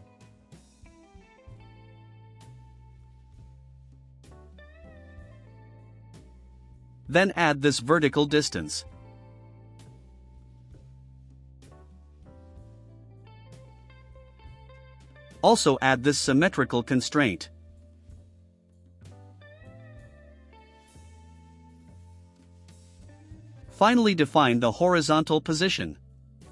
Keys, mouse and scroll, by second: 0.4 Return, 2.1 click, 2.7 click, 4.3 click, 5.3 click, 6.2 click, 9.4 click, 10.1 8, 10.5 5, 10.9 Return, 12.6-13.9 drag, 14.2 click, 15.0 click, 16.2 ctrl+click, 17.2 ctrl+click, 21.4 click, 23.1 click, 24.6 ctrl+click.